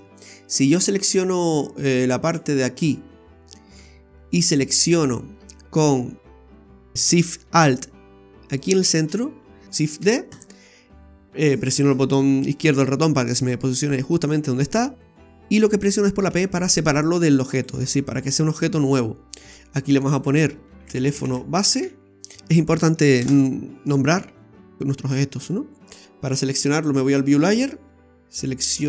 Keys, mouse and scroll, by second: 0.0 scroll down 2, 0.8 right click, 2.3 click, 2.8 right click, 3.5-3.8 scroll up 2, 3.8 shift+middle click, 4.3 scroll up 1, 4.4 scroll down 1, 4.7 shift+middle click, 5.5-5.8 scroll up 4, 8.6 alt+shift+right click, 9.9 shift+d, 16.3 p, 20.0 click, 20.2 click, 24.4 scroll up 1, 24.5 middle click, 24.5 scroll down 2, 25.2-25.5 scroll down 3, 26.0 middle click, 26.7-27.2 scroll up 3, 27.2-28.1 scroll down 1.